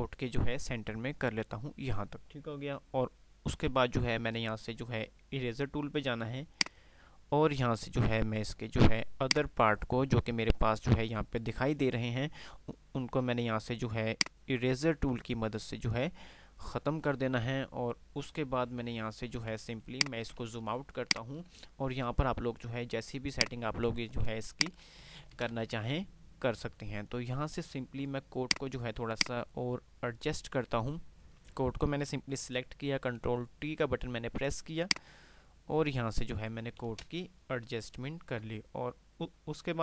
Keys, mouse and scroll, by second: 6.6 click, 12.9 click, 22.7 click, 23.4 click, 23.7 click.